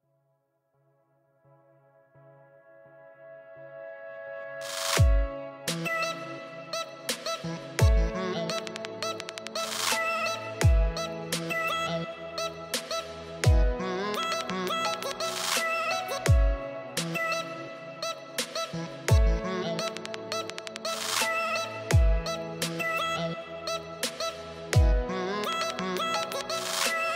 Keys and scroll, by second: 1.7 shift+o, 2.1 m, 3.4 b, 3.5 r, 3.5 e, 4.2 Return, 6.9-8.8 typing, 9.6 Return, 27.0 space.